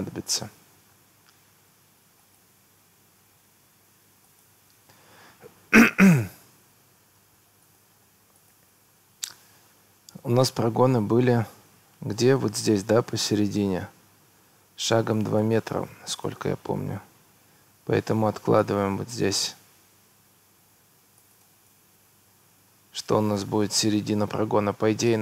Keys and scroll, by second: 0.9 Escape, 5.5 Escape, 21.5 Escape, 22.9 Escape.